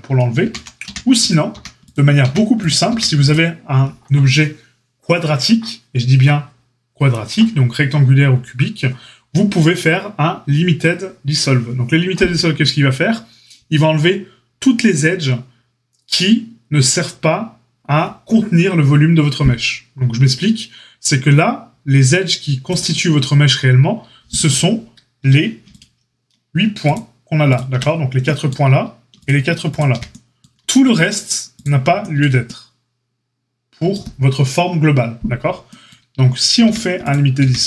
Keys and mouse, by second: 0.4 ctrl+z, 0.8 a, 1.4 a, 2.1 a, 2.8 a, 22.7-24.3 drag, 26.8 shift+click, 26.9-29.1 shift+middle drag, 29.1 shift+click, 29.2-37.6 shift+middle drag, 36.6 a, 37.3 a.